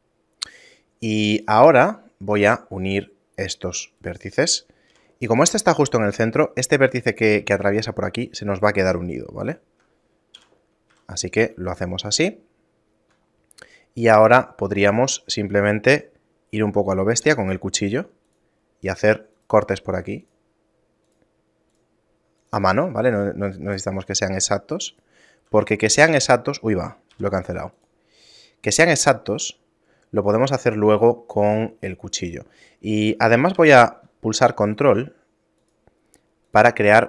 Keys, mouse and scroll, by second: 2.3 right click, 4.1 shift+right click, 4.9 j, 5.9 right click, 9.5 right click, 10.4 j, 10.9 a, 11.3 middle click, 11.7 shift+middle click, 17.3 k, 25.6 right click, 27.1 k, 32.3 right click, 33.6 k.